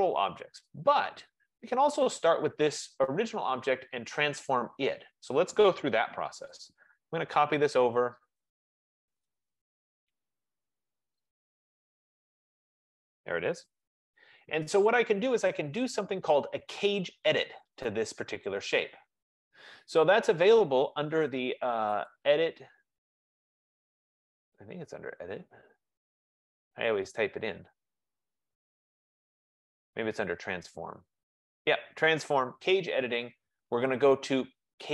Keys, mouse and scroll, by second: 2.3 click, 6.1-7.1 typing, 9.6-10.7 drag, 10.5-12.0 typing, 13.8 Escape, 16.0-17.3 drag, 17.8 click, 22.2 click, 23.8-27.3 drag.